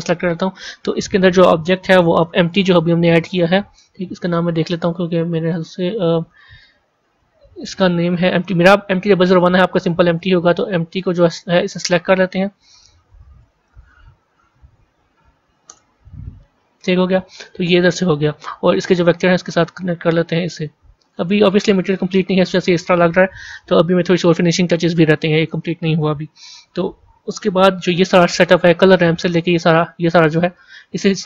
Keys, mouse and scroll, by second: 5.4 click, 10.9 click.